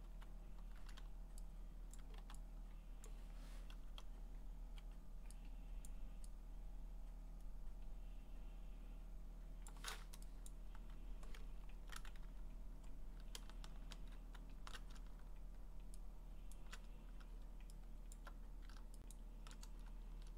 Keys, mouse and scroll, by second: 0.0-0.6 typing, 2.0 click, 2.2 x, 3.1 click, 4.0-4.8 ], 5.9 click, 9.7 click, 10.5 click, 10.8 q, 11.5 middle click, 11.5 scroll, 12.2 w, 13.8-14.8 middle drag, 13.8 w, 16.0 shift+w, 16.5 shift+click, 18.2 alt+click, 19.1 shift+click.